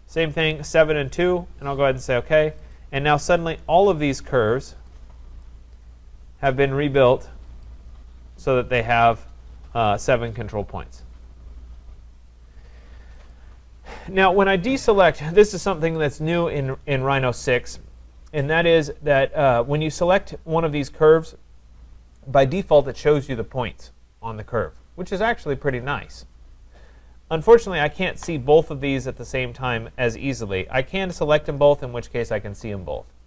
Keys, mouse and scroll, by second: 1.8 click, 2.7 click, 3.8 click, 4.6 click, 6.9 click, 6.9 click, 7.6 click, 13.3 click, 15.4 click, 20.2 click, 21.3 click, 27.6 click, 29.2 click, 30.9 shift+click.